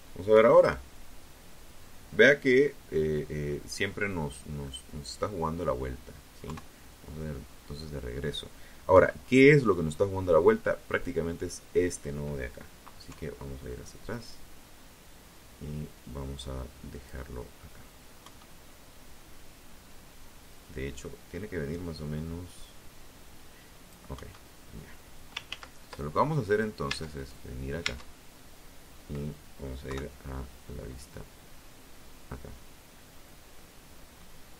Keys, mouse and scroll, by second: 0.2-0.6 scroll up 2, 2.4 scroll down 2, 2.7-3.1 scroll up 2, 4.6 KP_3, 7.1 KP_1, 9.1 right click, 11.3 KP_3, 12.3-15.4 drag, 16.3 KP_1, 18.7-22.3 drag, 22.3 KP_1, 23.6 ctrl+z, 25.0 Tab, 25.3 right click, 26.0 Tab, 26.7 scroll down 2, 28.0 KP_3, 31.0-31.4 scroll down 2, 31.7 middle click, 33.5 click, 34.2 click.